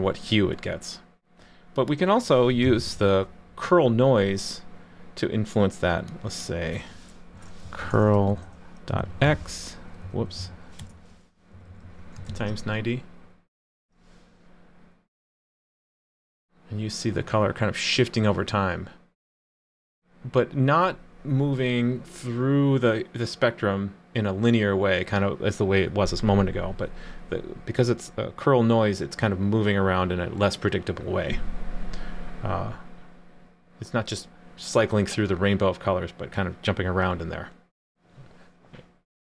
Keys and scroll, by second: 2.6 super+/, 12.3 super+s.